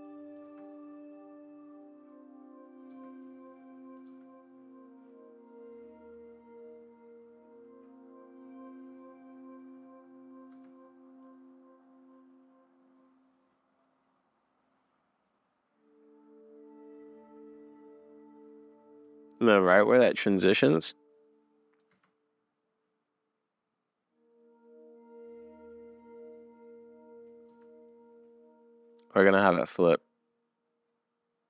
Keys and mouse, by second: 0.0 middle click, 0.1 click, 0.2 middle click, 0.5 space, 1.6 middle click, 2.9 space, 3.3 middle click, 4.1 space, 10.5 space, 11.2 click, 16.9 middle click, 18.2 middle click, 20.4 middle click, 21.9 space, 25.8 middle click, 26.0 middle click, 26.6 middle click, 26.8 middle click, 27.5 space, 27.9 click.